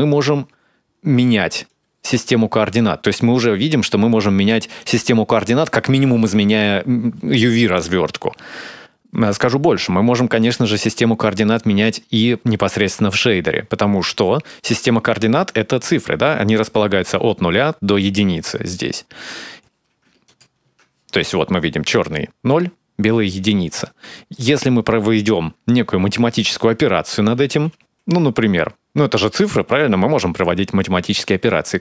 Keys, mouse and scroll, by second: 13.2 click, 20.1 ctrl+shift+click, 23.5-24.1 scroll up 1, 24.1 middle click, 27.2 shift+a.